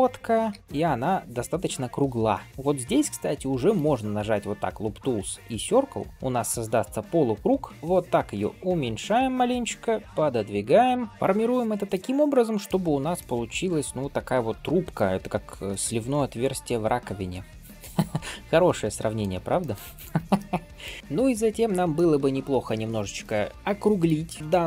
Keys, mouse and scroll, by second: 0.4 g, 2.4 alt+click, 2.4 middle click, 3.6-6.1 right drag, 6.1 middle click, 6.4 shift+middle click, 6.8 middle click, 7.7 s, 9.3 middle click, 10.0 g, 10.8 middle click, 11.1 Tab, 11.1 scroll up 2, 11.6 shift+middle click, 12.0-12.3 scroll down 1, 12.3 middle click, 12.7-13.1 scroll up 2, 13.0 middle drag, 13.3 Tab, 13.7 scroll up 2, 14.0 middle click, 15.0 scroll down 1, 15.5 shift+middle click, 16.3-19.1 middle drag, 19.5 shift+middle click, 19.9 click, 20.2 middle click, 20.9 shift+middle click, 21.8 shift+middle click, 23.1 middle click, 24.3-24.6 shift+middle drag.